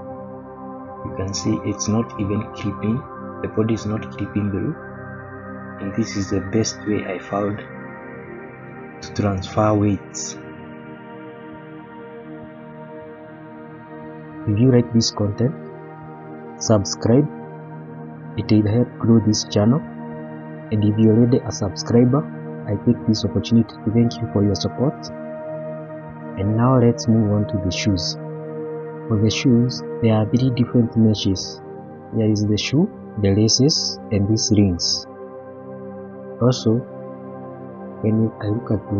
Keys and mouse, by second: 0.3-1.4 middle drag, 1.7-2.1 middle drag, 2.4-3.0 middle drag, 3.2-3.7 middle drag, 3.9-4.4 middle drag, 4.9-5.2 middle drag, 5.5-6.0 middle drag, 6.8-7.1 middle drag, 7.5-7.8 middle drag, 8.5-9.0 middle drag, 9.8-10.3 middle drag, 11.0 Page_Up, 13.1-13.7 middle drag, 16.6-17.6 middle drag, 20.0 middle click, 21.0 middle click, 23.4-23.7 middle drag, 24.8-25.4 middle drag, 26.8-27.2 shift+middle drag, 27.5 middle drag, 28.4 middle click, 29.7 middle click, 30.1-31.2 middle drag, 35.8 shift+middle drag, 36.3-36.6 middle drag, 36.9 shift+middle click, 37.8 click.